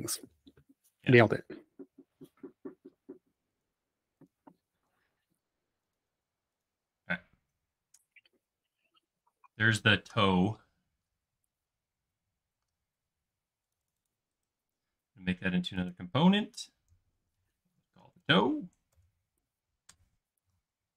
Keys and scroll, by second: 7.2 space, 17.6-18.9 typing, 19.9 Return.